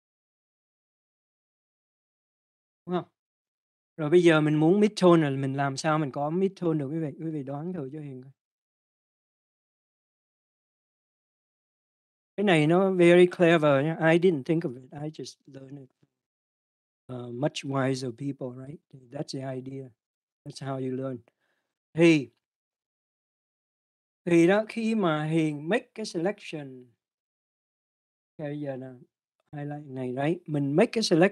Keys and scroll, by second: 0.0-0.8 typing, 1.5 Return.